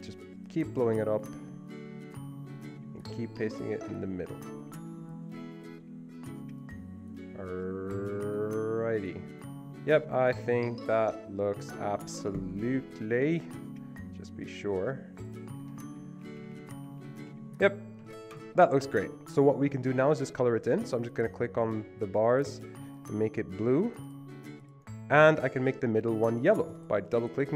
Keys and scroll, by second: 12.6 ctrl+Down, 12.8 ctrl+Down, 13.5 ctrl+Down, 13.5 Escape, 16.2 Down, 16.4 Down, 16.5 Down, 16.7 Down, 16.9 Down, 17.0 Down, 17.3 Down, 18.0 Escape.